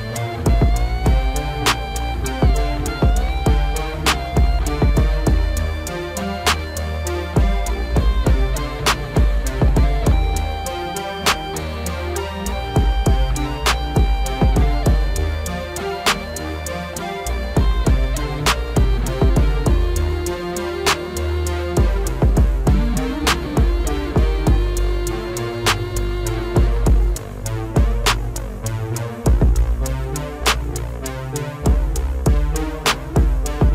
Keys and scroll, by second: 31.1 alt+w.